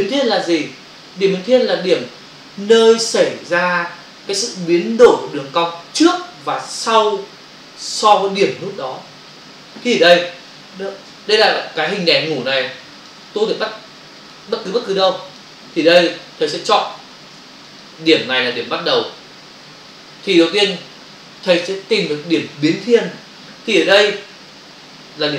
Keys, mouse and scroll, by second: 12.4 ctrl+click, 13.7 click, 14.6 ctrl+click, 16.1 ctrl+-.